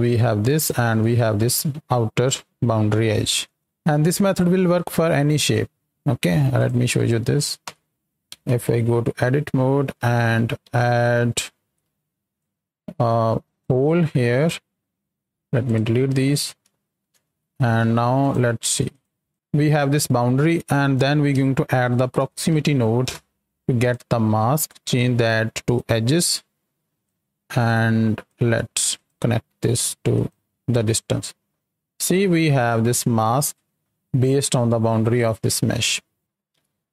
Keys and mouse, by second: 0.5 ctrl+shift+click, 2.3 click, 6.5 click, 6.9 click, 7.6 x, 8.4 Tab, 10.1 shift+middle click, 10.6 alt+a, 11.6 ctrl+b, 12.3-13.6 drag, 15.2 x, 16.7 shift+middle click, 17.2 Tab, 18.2-19.0 ctrl+shift+drag, 19.3-19.6 ctrl+shift+drag, 19.6 ctrl+h, 20.6 drag, 23.8-25.8 drag, 26.1 click, 27.6 click, 28.9 ctrl+shift+drag, 29.7 ctrl+shift+click, 30.2 ctrl+shift+click, 35.9 click, 36.4 ctrl+h.